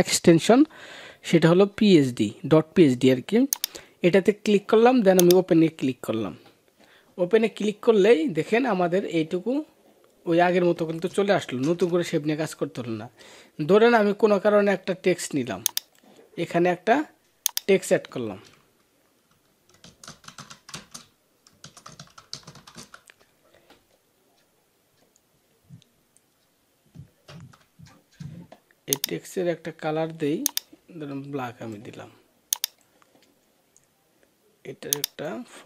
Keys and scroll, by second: 11.4 ctrl+-, 15.5 ctrl+-, 27.1 ctrl+a.